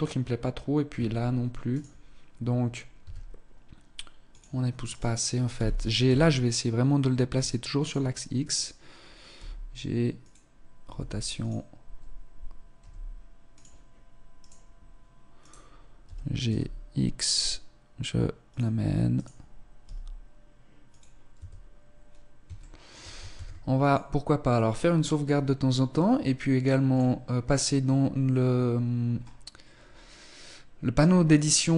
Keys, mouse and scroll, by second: 0.7 Tab, 1.7 right click, 2.3 scroll up 2, 2.9 s, 4.9 right click, 5.6 g, 8.0 right click, 9.4 g, 10.8 r, 12.8 r, 14.2 right click, 15.4 right click, 16.0 g, 19.2 right click, 19.8 g, 21.4 Tab, 22.6 shift+middle click, 22.7 ctrl+s, 26.9 click, 28.5-29.2 scroll up 3, 31.4 click.